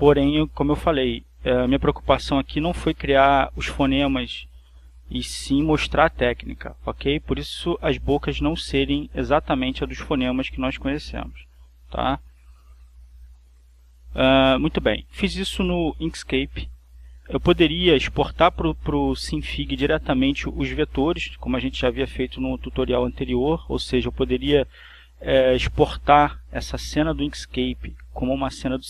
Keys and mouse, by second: 1.5 click, 2.8 click, 4.8 click, 5.4 click, 9.8-11.3 drag, 11.7 click, 13.4 click, 17.3 click, 22.3 click.